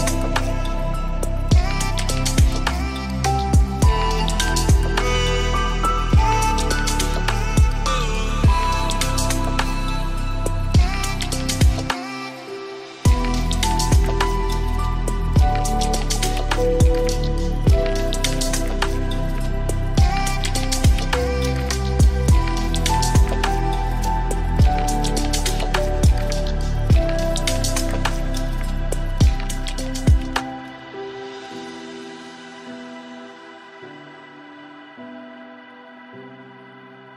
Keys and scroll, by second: 27.8 ctrl+space.